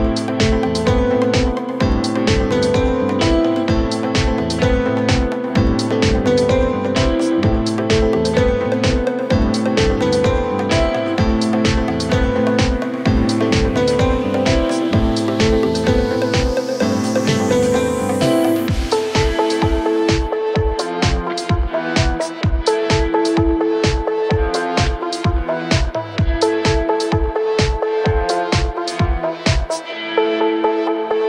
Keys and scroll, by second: 22.4 5, 22.7 Return, 23.9 ctrl+z, 25.0 5, 25.2 Return.